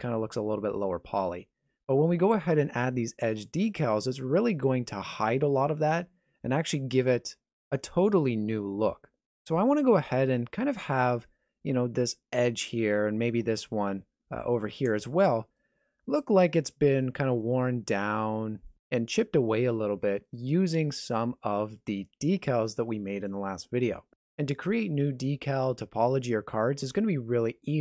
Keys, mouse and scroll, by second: 13.2 middle click, 15.1 shift+middle click.